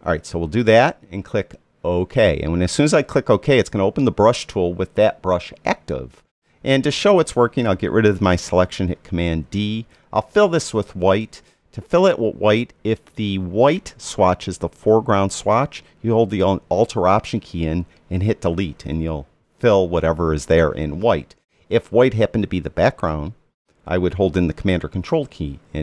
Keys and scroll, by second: 9.2 super+d, 18.4 alt+BackSpace.